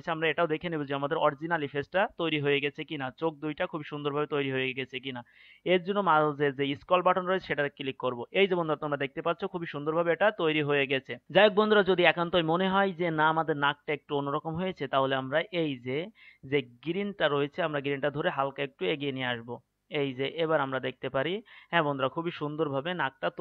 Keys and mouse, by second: 5.2-6.4 middle drag, 6.7-10.0 drag, 10.0-17.2 middle drag, 17.2-19.5 drag.